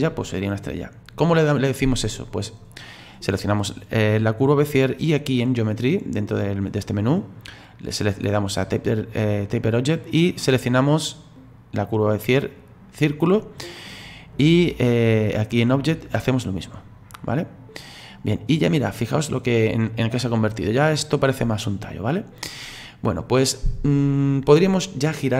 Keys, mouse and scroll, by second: 10.2 click, 15.9 click, 18.2-18.8 scroll up 3, 18.8-20.9 middle drag, 20.9-21.6 scroll down 4, 21.6-22.3 scroll up 2, 22.3-22.6 scroll down 2, 22.6-25.3 middle drag.